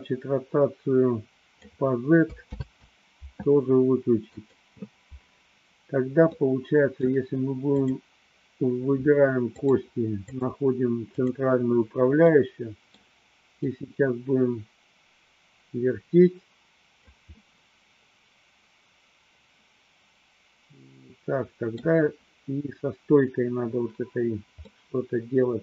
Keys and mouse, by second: 2.6 ctrl+z, 4.3 click, 6.4 middle click, 7.9 click, 9.6-10.5 drag, 11.3-11.8 drag, 12.4-13.2 middle drag, 13.7-17.3 drag, 17.6-22.0 middle drag, 24.7-25.6 middle drag.